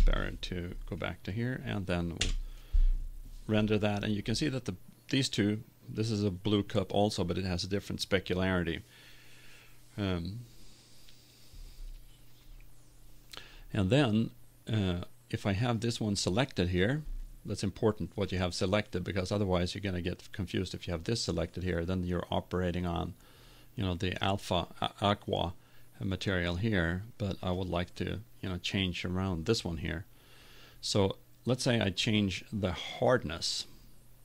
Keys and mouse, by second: 0.0 ctrl+Up, 2.6 F12.